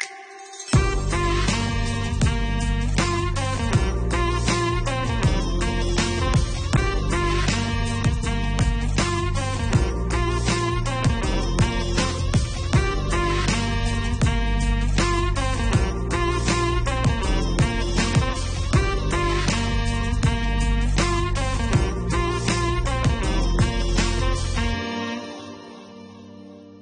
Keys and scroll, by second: 17.1 9, 17.8 3, 18.2 4, 19.2 Return.